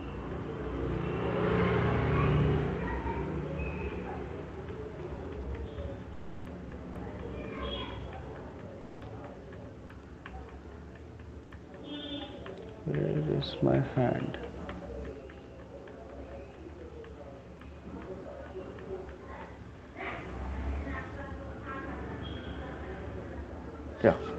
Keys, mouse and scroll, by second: 0.3 Right, 0.7 Right, 0.9 Right, 1.4 Right, 1.8 Right, 2.0 Right, 2.2 Right, 2.4 Right, 2.6 Right, 2.8 Right, 3.0 Right, 3.6 Right, 3.8 Right, 4.0 Right, 4.2 Right, 4.7 Right, 4.9 Right, 5.1 Right, 5.5 Right, 5.7 Right, 5.9 Right, 6.1 Right, 6.5 Right, 6.9 Right, 7.1 Right, 7.3 Right, 7.5 Right, 7.8 Right, 8.0 Right, 8.2 Right, 8.6 Right, 8.8 Right, 9.2 Right, 9.4 Right, 9.6 Right, 10.0 Right, 10.4 Right, 10.6 Right, 10.8 Right, 11.0 Right, 11.2 Right, 11.6 Right, 11.8 Right, 12.0 Right, 12.3 Right, 12.7 Right, 13.1 Right, 13.3 Right, 13.5 Right, 13.9 Right, 14.1 Right, 14.3 Right, 14.5 Right, 14.9 Right, 15.1 Right, 15.5 Right, 15.7 Right, 15.9 Right, 16.1 Right, 16.5 Right, 16.8 Right, 16.9 Right, 17.2 Right, 17.8 Right, 18.2 Right, 18.6 Right, 19.0 Right, 19.2 Right, 19.6 Right, 19.8 Right, 20.0 Right, 20.3 Right, 20.6 Right, 20.9 Right, 21.1 Right, 21.3 Right, 21.5 Right, 21.9 Right, 22.1 Right, 22.3 Right, 22.5 Right, 22.7 Right, 22.9 Right, 23.1 Right, 23.3 Right.